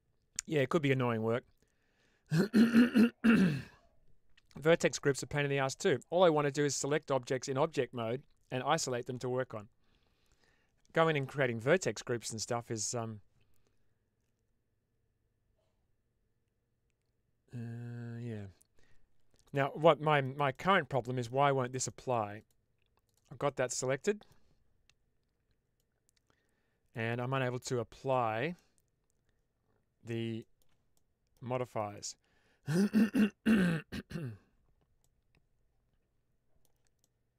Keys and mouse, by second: 19.3-20.1 middle drag, 20.4 shift+middle drag, 20.8-21.2 middle drag, 21.9 shift+middle click, 22.3 click, 22.9 click, 23.3-24.3 middle drag, 25.7-26.8 drag, 27.9 click, 28.4-30.0 middle drag, 30.3 shift+middle click, 30.8-31.2 middle drag, 31.5 shift+middle drag, 31.8-33.4 middle drag, 34.9-36.6 middle drag, 36.9-37.3 shift+middle drag.